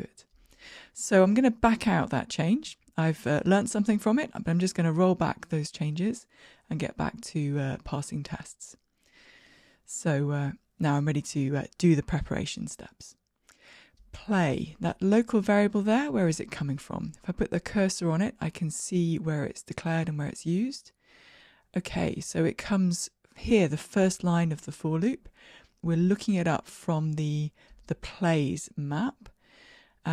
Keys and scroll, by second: 3.1 super+k, 6.8 alt+super+z, 8.4 shift+Escape, 9.5 ctrl+r, 9.5 shift+F10.